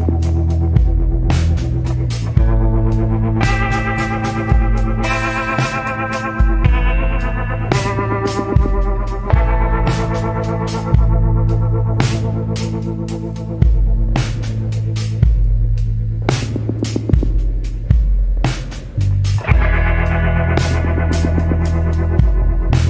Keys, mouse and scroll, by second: 3.8 scroll down 1, 5.9 scroll up 1, 6.6 scroll down 1, 7.5 scroll up 1, 14.8 scroll down 1, 17.4 scroll up 1, 21.1 scroll down 1, 22.5 scroll up 1.